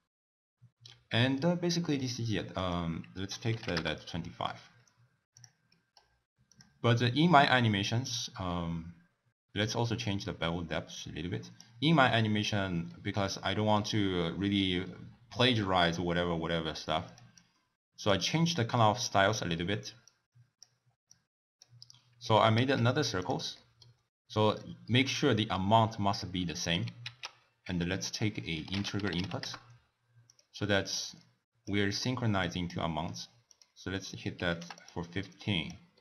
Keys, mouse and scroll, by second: 0.9-2.6 middle drag, 2.6-5.4 drag, 5.6 middle click, 6.5 click, 6.9-9.9 scroll up 4, 9.9-11.9 drag, 11.9-12.9 scroll down 2, 12.9-14.7 middle drag, 14.7 scroll down 1, 14.8-17.0 scroll up 1, 17.0 drag, 17.3-20.1 drag, 21.1 click, 22.2 click, 22.6 shift+d, 23.5-23.9 middle drag, 23.9-24.9 scroll up 2, 24.9-26.4 scroll up 3, 26.4 middle click, 26.9 ctrl+a, 30.8-34.8 drag, 35.3-35.9 drag, 35.9-36.0 middle drag.